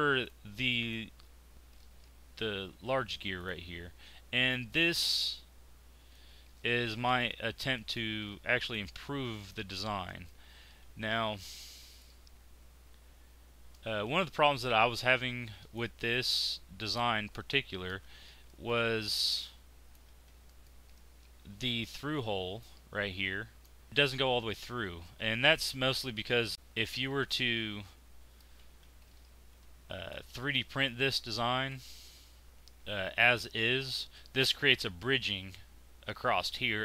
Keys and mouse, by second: 7.1-8.7 drag, 8.7-10.0 middle drag, 11.1 click, 12.7 middle click, 16.4 middle click, 16.7 middle click, 18.1 z, 20.1 z, 26.5-27.7 middle drag, 29.3 z, 31.1 z, 32.3-36.8 drag.